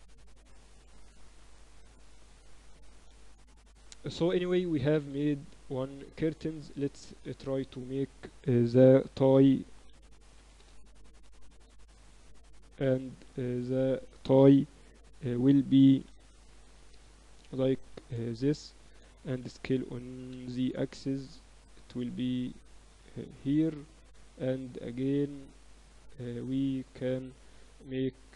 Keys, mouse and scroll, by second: 0.9 Tab, 1.5 z, 2.7 ctrl+s, 3.7 Tab, 5.3 Tab, 6.6 shift+a, 9.7 r, 11.3 s, 15.9 r, 17.8 Tab, 18.1 z, 18.8 a, 19.0 a, 19.3 s, 23.3 KP_7, 25.7 click, 27.1 KP_1, 27.7 ctrl+r.